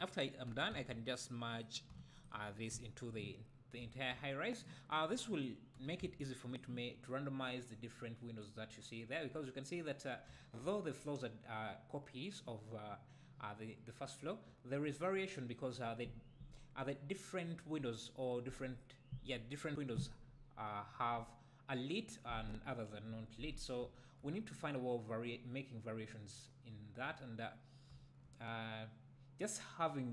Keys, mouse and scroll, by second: 0.5 g, 1.6 click, 2.1 shift+click, 2.7 `, 3.5 scroll down 1, 3.8 `, 4.9-5.4 drag, 5.7 g, 6.5 click, 7.1-7.8 scroll up 1, 10.3 `, 10.7-13.1 scroll down 1, 14.2 scroll up 1, 14.4 `, 18.0-18.4 scroll down 1, 23.8 `, 27.5-27.9 scroll down 1, 27.9 `.